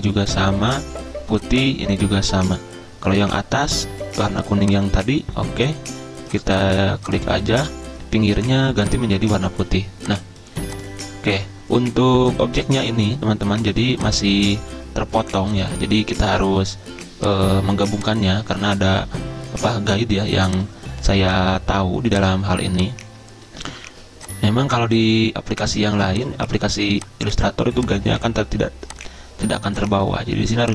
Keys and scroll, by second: 25.6 ctrl+z.